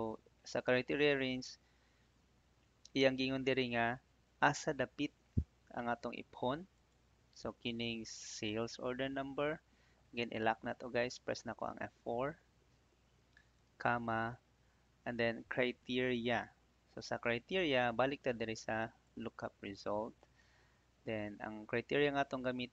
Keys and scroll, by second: 12.2 F4, 13.6 /.